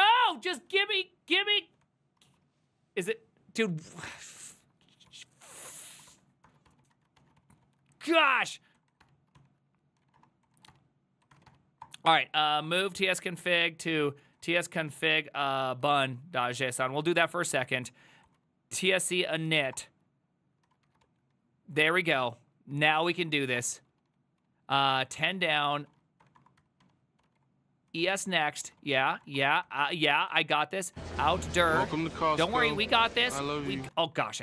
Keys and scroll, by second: 0.0-2.7 typing, 4.1 alt+[, 4.6 alt+{, 5.1 ctrl+c, 5.5-34.4 typing, 7.4 ctrl+c, 7.7 ctrl+c, 32.0 ctrl+}.